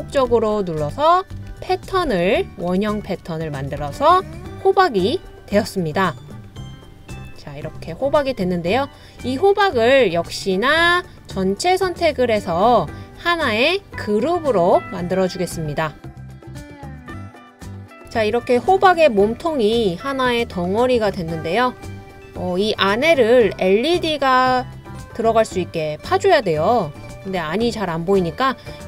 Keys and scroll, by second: 0.3 super+d, 1.0 super+d, 1.5 super+d, 2.1 super+d, 2.8 super+d, 3.8 super+d.